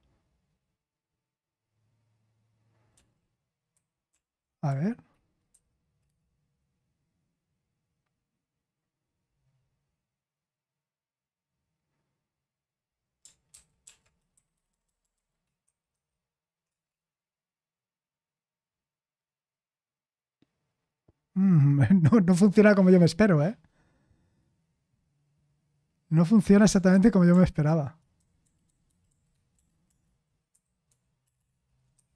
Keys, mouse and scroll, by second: 4.1 ctrl+p, 4.6 Left, 5.5 0, 6.0 Return, 16.6 Return, 16.6 typing, 29.8 BackSpace, 30.5 0, 30.8 ,, 31.9 ..